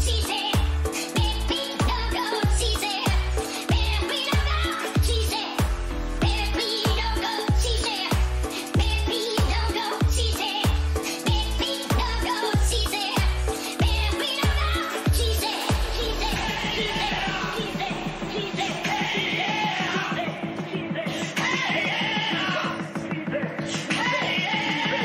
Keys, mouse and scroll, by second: 2.3 a, 2.5 a, 2.9 a, 5.4-7.1 middle drag, 7.1-9.5 right drag, 9.5-12.1 drag, 18.0-22.4 drag, 20.8-25.0 middle drag, 20.8-22.4 right drag, 24.6 a.